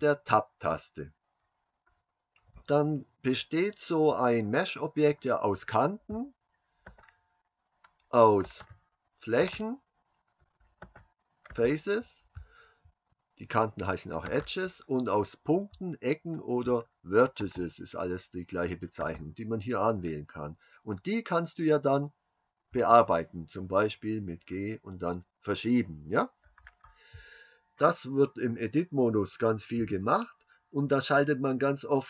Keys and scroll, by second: 22.7 g.